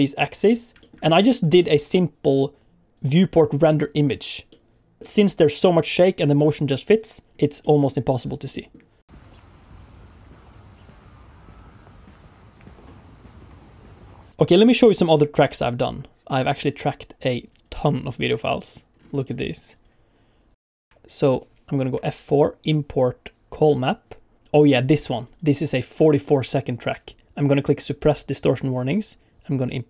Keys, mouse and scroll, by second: 0.8 shift+middle click, 1.8 click, 21.5 F4, 21.9 F4.